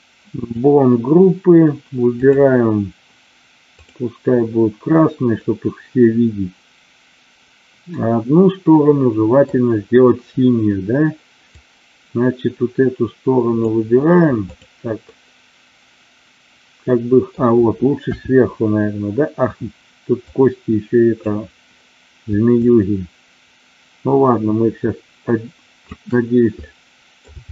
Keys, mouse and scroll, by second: 0.4 click, 2.2 click, 3.7 click, 5.4-9.5 middle drag, 11.5-13.7 drag, 15.0-17.3 middle drag, 18.0 KP_7, 20.3-21.4 drag, 22.6-26.0 shift+drag, 26.6-27.1 middle drag.